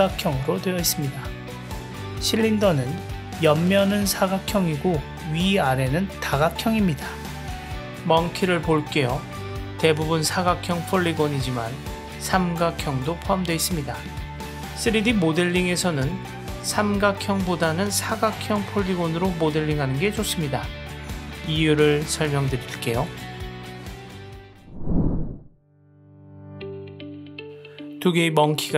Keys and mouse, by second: 0.8 click, 2.3 click, 2.6 click, 2.8 click, 3.0 click, 3.1 click, 3.6 click, 4.0-5.0 middle drag, 5.2 click, 5.6 middle click, 8.4 click, 9.3 click, 10.2-11.9 middle drag, 12.7 click, 13.3 click, 13.8 click, 14.6-22.0 middle drag, 23.2 click, 24.4 click.